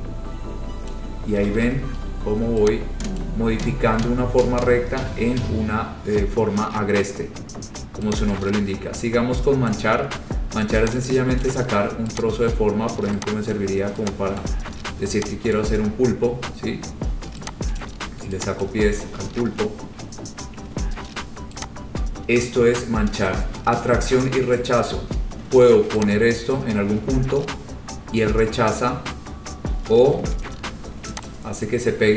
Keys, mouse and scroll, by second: 0.2 scroll, 1.0 click, 1.6 ctrl+z, 1.7 ctrl+z, 3.4 click, 5.0-5.4 scroll, 9.8 click, 10.3-10.6 scroll, 11.6 click, 12.7 click, 13.7 click, 14.6 click, 15.8 click, 16.1 scroll, 16.2 scroll down 5, 16.4-16.8 scroll up 5, 18.0 click, 18.2-18.6 scroll, 18.8 click, 19.2 ctrl+z, 19.3 ctrl+z, 20.1-20.9 scroll, 24.2 click, 26.7 click, 28.3 click, 31.4 click.